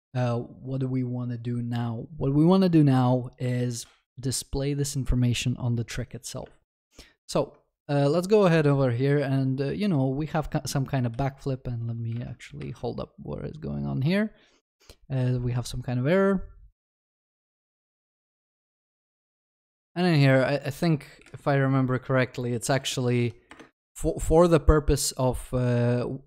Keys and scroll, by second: 12.7 alt+F12, 23.5 Return, 25.0 ctrl+s.